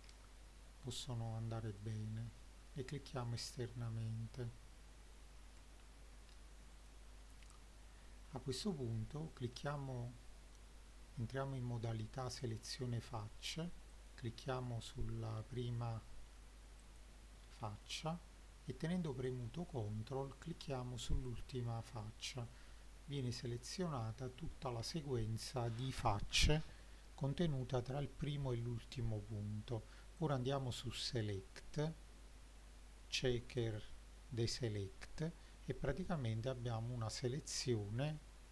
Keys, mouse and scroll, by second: 1.8 click, 2.9 middle click, 5.4 KP_7, 6.7 click, 7.2 middle click, 7.8-8.4 scroll up 4, 8.6 middle drag, 9.6 click, 11.9 3, 12.5 click, 13.9 click, 15.2-16.8 scroll down 2, 16.8 click, 16.8 scroll down 1, 17.4 scroll down 2, 17.8 middle click, 18.7-19.3 scroll up 2, 19.3 middle click, 19.7-20.2 scroll up 2, 21.3 ctrl+click, 24.0-24.3 scroll down 1, 24.3 middle click, 30.2-32.0 drag, 37.6-38.5 scroll up 6.